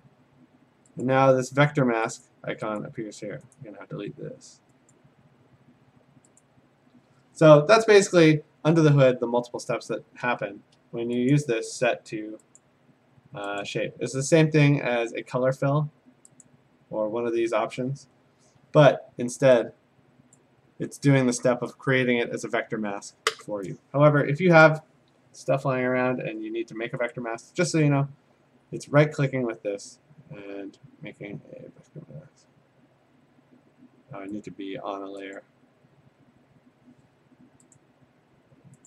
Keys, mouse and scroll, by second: 1.0 click, 2.3 click, 2.8 click, 3.6 right click, 4.9 click, 6.4 click, 10.2 a, 11.3 click, 12.6 click, 13.6 click, 16.5 click, 18.6 Escape, 20.4 click, 22.8 click, 24.7-26.1 drag, 27.1 right click, 29.3 right click, 34.5 click, 37.8 click.